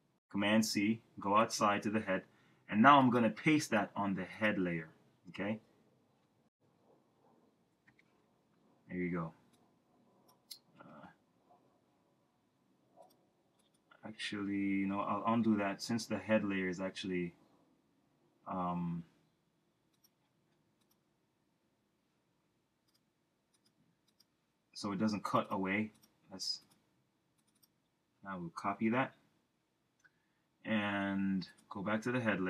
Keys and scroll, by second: 7.7 shift+super+v, 10.8 super+z, 14.9 super+z, 28.8 super+c.